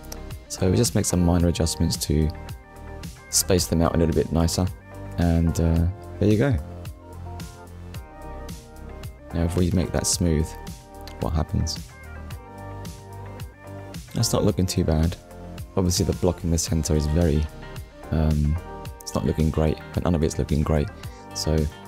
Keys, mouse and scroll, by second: 1.3 middle click, 2.3 Tab, 2.7 scroll down 1, 3.1 middle click, 4.7 click, 5.0 shift+middle click, 8.2 click, 9.7 ctrl+s, 10.7 right click, 12.8 click, 13.7 click, 14.1 middle click, 18.9 click, 21.5 click.